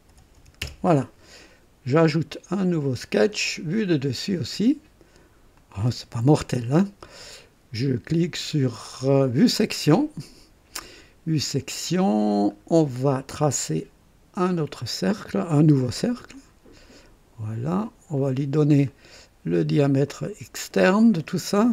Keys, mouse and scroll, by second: 0.0-0.3 typing, 0.6 Return, 2.7 click, 4.5 click, 5.6 click, 9.2 click, 11.1-11.4 scroll up 1, 11.8 scroll down 1, 14.4 click, 16.3 click, 18.1 click, 18.8 right click, 20.0 click, 21.2 click.